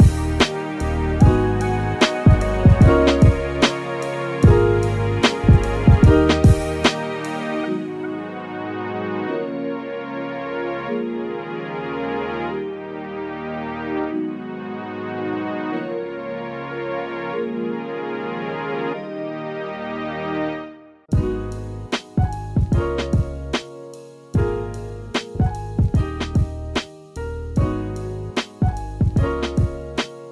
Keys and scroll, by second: 11.8 super+z, 14.3 super+z, 17.5 super+z, 28.2 super+z.